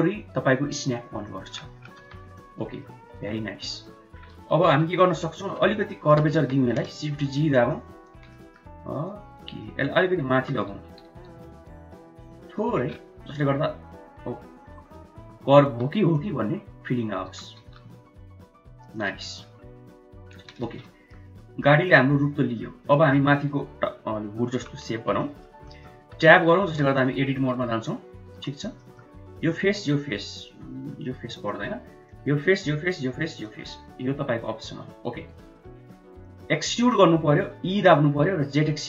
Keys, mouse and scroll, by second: 1.2 middle click, 1.9 Tab, 2.2-2.7 middle drag, 3.0 click, 3.3-3.8 middle drag, 4.4 KP_1, 4.8 KP_3, 5.7 shift+middle click, 6.2 Tab, 6.8 shift+z, 7.6 click, 8.3 shift+middle click, 9.0 shift+click, 9.5 shift+middle click, 10.3 g, 13.1 Tab, 15.1 Tab, 15.5 1, 16.1 click, 17.2 g, 19.1 Tab, 20.5 shift+z, 20.7-21.1 drag, 21.2 Tab, 21.6 middle click, 22.8 middle drag, 24.9 KP_1, 24.9 KP_3, 25.1 middle drag, 25.6 middle click, 25.9 Tab, 26.6 3, 27.5 Tab, 28.2 3, 28.7 middle click, 30.0 middle click, 31.4 shift+middle click, 32.0 shift+click, 32.3 shift+click, 35.3 middle click, 36.2 middle click, 37.6 e.